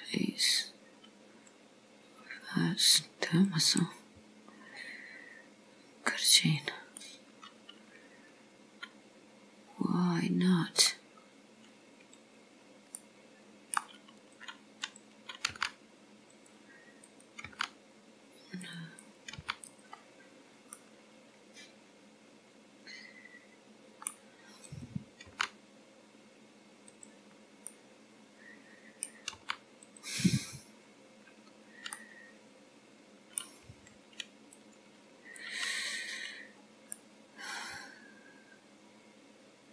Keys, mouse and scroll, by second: 3.5 click, 6.5 click, 7.1 middle click, 11.3 scroll up 3, 12.2 click, 13.0 middle click, 13.9 scroll down 1, 14.3 click, 14.9 click, 15.5 g, 17.1 click, 17.6 g, 19.0 click, 19.4 g, 20.8 middle click, 24.7 click, 25.4 g, 27.5-27.8 scroll down 2, 27.8 middle click, 29.5 g, 30.6-32.0 scroll up 1, 32.0 middle click, 32.0 scroll up 1, 34.6 click, 35.5 click, 37.0 middle click.